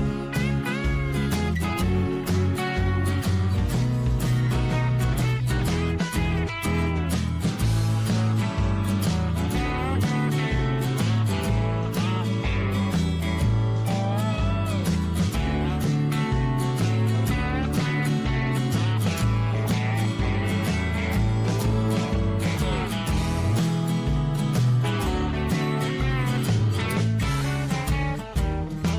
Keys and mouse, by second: 2.0 click, 4.8 shift+middle click, 5.8 click, 9.0-11.4 drag, 12.3-14.0 drag, 15.1 click, 15.3 click, 16.7 click, 16.9-17.9 drag, 18.4 middle click, 19.5 shift+middle click, 19.9-21.1 middle drag, 21.3 2, 22.0 click, 22.8 click, 23.7 f, 24.6 middle click, 25.0 f, 25.4 middle click, 26.0 f, 26.3 middle click, 26.7 f, 27.4 shift+middle click, 27.9 middle click, 28.5 middle click.